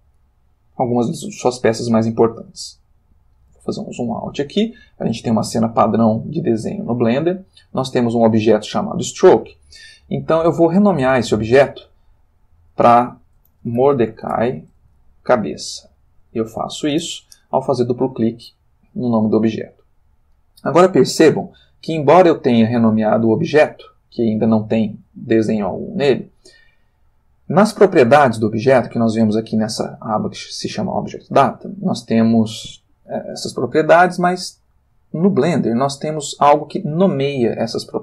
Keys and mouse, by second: 0.1 click, 2.6 ctrl+middle click, 12.2 click, 13.5-16.7 typing, 16.9 Return.